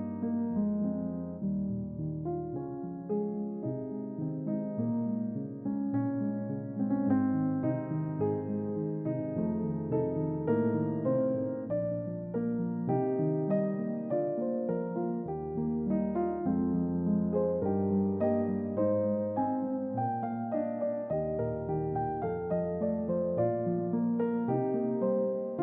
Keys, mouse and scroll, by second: 3.0 typing, 4.8 click, 6.9 typing, 7.4 click, 8.3 typing, 8.9 middle click, 9.0-9.8 scroll up 2, 10.5-11.3 typing, 11.8 click, 12.4 click, 14.2 typing, 16.9 click, 17.4-18.7 middle drag, 19.7 typing, 20.3 middle click, 21.5-22.8 shift+middle drag.